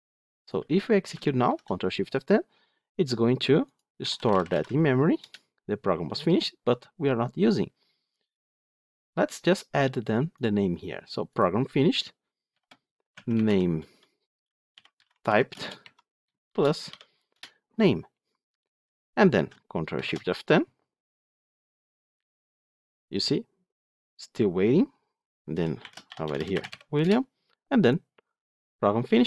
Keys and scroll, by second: 1.3 ctrl+shift+F10, 17.2 Return, 19.8 ctrl+shift+F10.